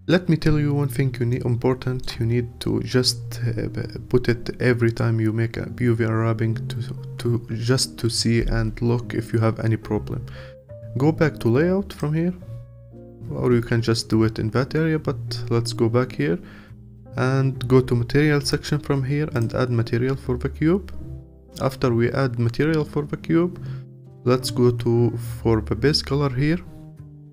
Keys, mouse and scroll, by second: 0.4-1.1 scroll down 1, 1.3-11.9 alt+middle drag, 11.9 click, 19.4-22.0 drag, 22.0-22.4 scroll down 1.